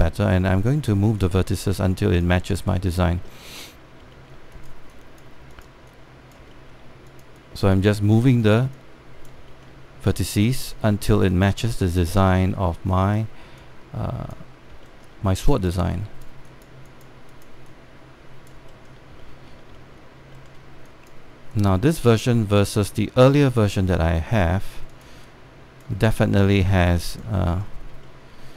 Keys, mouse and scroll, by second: 3.3 alt+middle click, 4.1 alt+middle click, 4.6 scroll up 1, 4.9 alt+middle click, 5.2 click, 7.3 alt+middle click, 7.8 click, 8.7 alt+middle click, 9.1 click, 10.2 alt+middle click, 10.7 click, 13.2 alt+middle click, 13.6 click, 15.5 alt+middle click, 16.2-19.2 drag, 19.4 alt+middle click, 20.0 alt+middle click, 20.4 alt+middle click, 21.0 alt+middle click, 21.5 click, 22.8 alt+middle click, 23.4 click, 24.8 alt+middle click, 25.6 click, 28.2 alt+middle click.